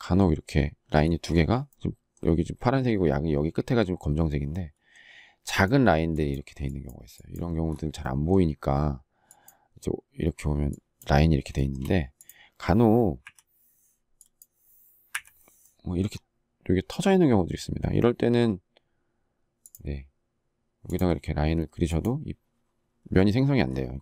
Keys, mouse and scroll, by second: 11.5 shift+middle click, 13.0 Delete, 14.9 Delete.